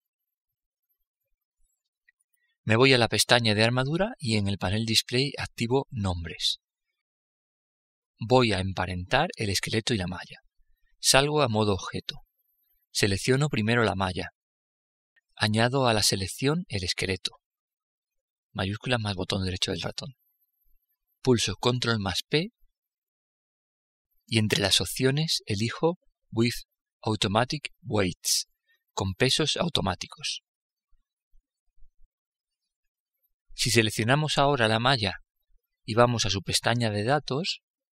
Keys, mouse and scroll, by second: 3.8-7.4 drag, 10.8 Tab, 13.0-14.8 right drag, 18.2-19.9 right drag, 21.3 ctrl+p, 34.0-35.8 right drag, 37.8-37.9 drag.